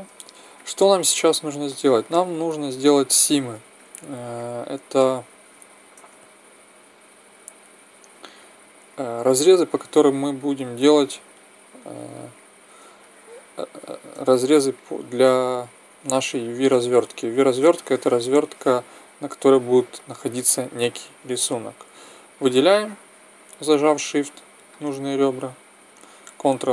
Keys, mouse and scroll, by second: 1.5 Tab, 6.0 ctrl+Tab, 8.8 right click, 9.3 right click, 11.1-13.0 right drag, 13.0-14.7 middle drag, 14.7-16.1 right drag, 16.1 middle click, 16.5 right click, 16.5-24.4 middle drag, 24.7-26.7 middle drag.